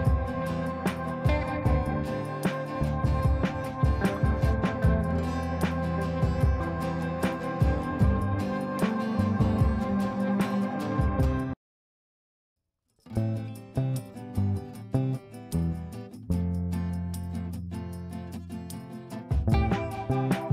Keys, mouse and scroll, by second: 0.3 ctrl+right click, 0.8 click, 1.5 ctrl+a, 2.3-12.5 typing, 14.3-15.3 drag, 19.5 l.